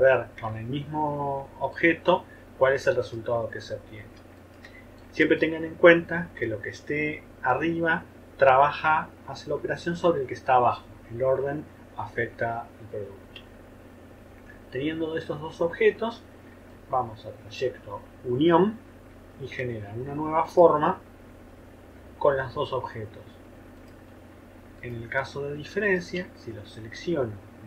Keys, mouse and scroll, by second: 4.4 shift+click, 5.0 shift+middle click, 5.1 click, 5.2 middle click, 5.2 click, 5.4 middle click, 25.9 shift+click.